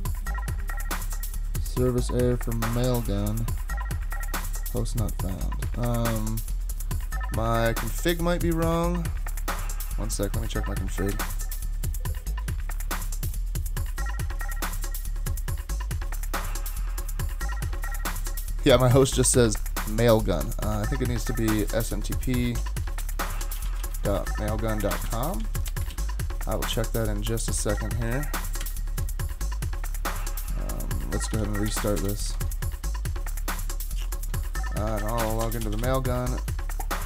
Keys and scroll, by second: 5.8 super+Tab, 11.1 alt+super+0, 31.3 ctrl+c, 32.0 Return, 32.3 super+Tab, 35.0-36.3 typing.